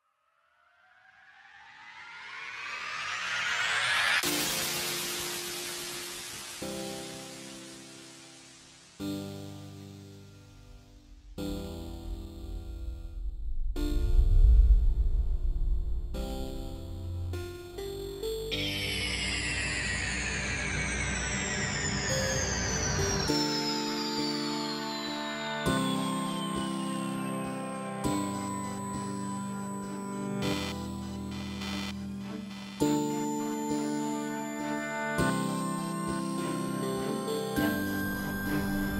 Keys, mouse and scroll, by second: 0.0 KP_0, 1.3 click, 1.6 alt+a, 2.3 click, 2.6 alt+a, 2.7 scroll down 1, 3.3 shift+middle click, 3.7 shift+right click, 10.9 KP_Decimal, 11.1 middle click, 11.2 shift+middle click, 11.5 middle click, 11.8 click, 12.8 click, 12.8 alt+a, 13.2 KP_0, 13.3 scroll up 1, 13.7 middle click, 13.7 scroll down 1, 14.2 shift+middle click, 14.2 shift+right click, 21.6 scroll down 5, 21.7 alt+a, 21.8 scroll up 3, 22.2 middle click, 22.6 KP_0, 24.4 middle click, 24.7 shift+middle click, 25.1 s, 25.2 middle click, 25.6 shift+middle click, 26.0 click, 26.6 middle click, 27.0 click, 27.4 KP_0, 27.5 alt+a, 27.6 scroll up 2, 27.9 scroll down 2, 28.5 click, 31.7 click, 32.2 alt+a, 34.5 alt+a, 34.7 click, 35.2 s, 35.3 alt+a, 35.5 click, 35.9 s, 37.7 middle click, 37.8-38.6 scroll up 5, 38.0 shift+middle click, 38.4 shift+middle click.